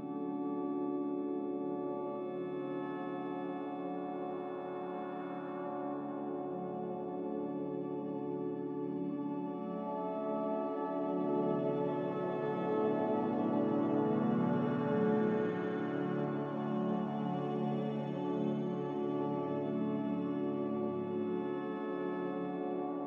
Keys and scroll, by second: 2.2 a.